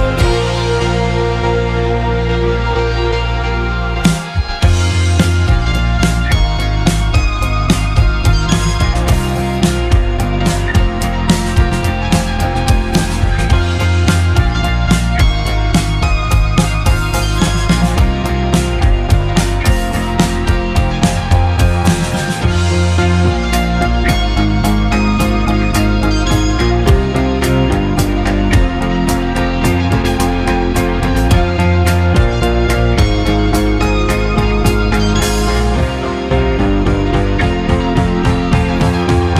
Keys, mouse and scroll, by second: 1.3-2.3 scroll up 4, 2.3 r, 5.5 g, 9.7 g, 17.9-19.0 scroll down 7, 19.0-20.3 drag, 22.7-24.0 drag, 24.0 g, 30.6 g, 34.6 g.